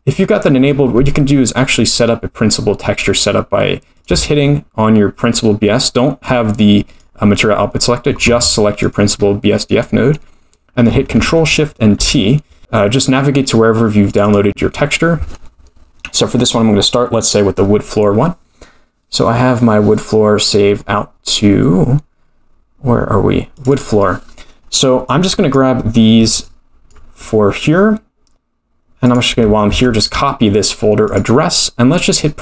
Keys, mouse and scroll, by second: 0.7-1.3 scroll up 1, 1.3 middle click, 1.3 scroll up 4, 3.9 click, 6.2 click, 8.8 click, 9.2-9.7 scroll up 1, 9.7 scroll up 5, 9.8 middle click.